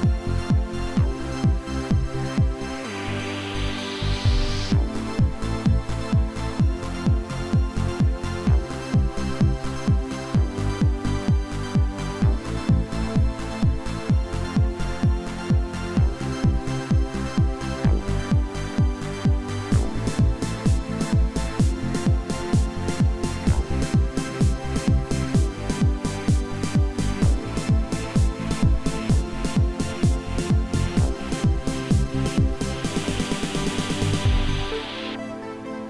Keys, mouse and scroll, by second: 0.1-0.5 scroll up 2, 0.5-1.9 typing, 0.8 Up, 3.1-5.2 typing, 5.0 Up, 5.5 Return, 5.8 middle click, 5.9 shift+middle click, 6.1 middle click, 6.4 shift+middle click, 6.5 middle click, 7.3 scroll down 10, 7.7 shift+middle click, 8.4 scroll up 13, 8.6 middle click, 9.6 scroll up 3, 9.7 scroll down 7, 9.8 scroll up 4, 10.1 middle click, 10.2 middle click, 10.2 s, 16.3 scroll down 12, 16.7 middle click, 17.1 scroll up 11, 25.2 5.